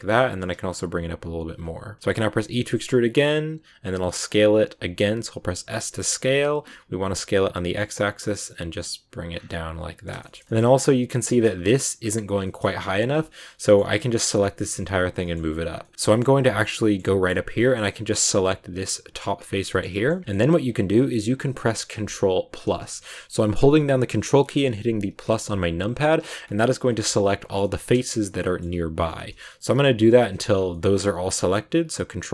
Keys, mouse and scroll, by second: 9.2 scroll down 2, 9.4-10.5 middle drag, 10.5 scroll up 1, 11.1 scroll up 3, 11.2 middle click, 12.3-15.6 middle drag, 15.6 scroll up 1, 15.7 middle click, 16.1 scroll down 1, 16.3 shift+middle click, 16.7 scroll up 1, 16.7 shift+middle click, 17.2-18.2 scroll up 1, 18.2 right click, 19.3 scroll down 2, 19.6 shift+middle click, 20.6-21.2 scroll up 1, 22.6 ctrl+KP_Add, 25.2 ctrl+KP_Add, 26.8-27.9 middle drag, 27.9 ctrl+KP_Add, 28.4 middle click, 29.1 ctrl+KP_Add, 29.7 ctrl+KP_Add, 30.5 scroll down 1, 30.6-32.3 middle drag.